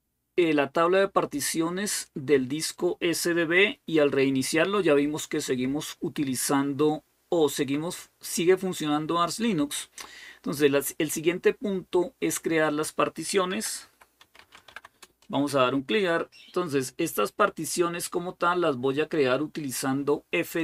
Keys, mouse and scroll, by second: 13.5-15.0 typing, 16.9 typing, 17.5-18.6 scroll down 1, 20.3 click.